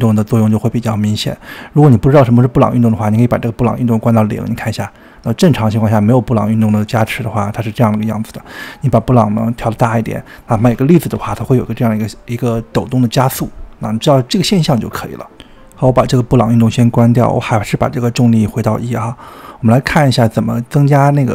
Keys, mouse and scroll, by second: 2.6-5.7 drag, 10.9-12.9 drag, 15.6-16.6 drag, 17.7-21.3 drag.